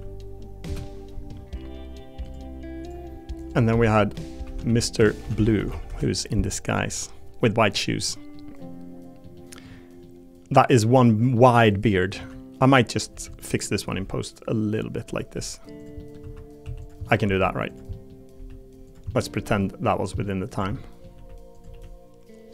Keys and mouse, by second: 2.2 click, 3.7 F2, 6.7 click, 7.4 middle click, 8.1 middle click, 8.6 middle click, 9.3 middle click, 10.0 middle click, 11.3 middle click, 13.1 Tab, 13.1 3, 13.5 click, 13.9 g, 15.3 r, 15.8 click, 16.0 click, 16.2 1, 16.6 2, 17.0 click, 17.2 g, 17.9 click, 18.3 3, 19.1 click, 19.4 g, 20.1 click, 20.5 click, 20.7 click, 21.1 r, 21.5 click, 21.8 g.